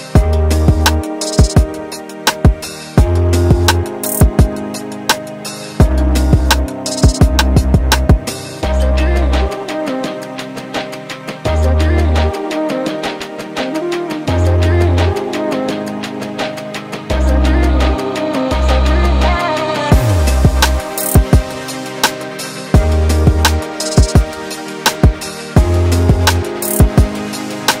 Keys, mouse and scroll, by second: 0.2 alt+a, 0.8 alt+click, 4.2 alt+a, 4.5 Tab, 6.2-8.4 right drag, 8.4 click, 9.1 alt+a, 9.2 scroll down 1, 9.5-12.7 middle drag, 15.8-16.7 scroll down 2, 16.7 KP_1, 21.5 click, 21.8-22.9 scroll up 2, 22.9 shift+middle click, 23.8 shift+d, 25.3 click, 27.5-27.8 scroll down 1.